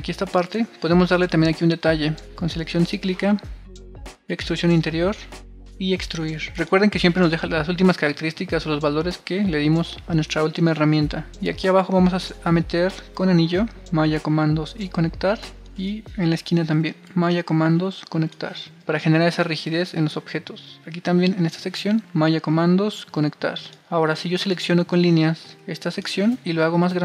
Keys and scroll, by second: 10.2 super+r, 18.6 super+r.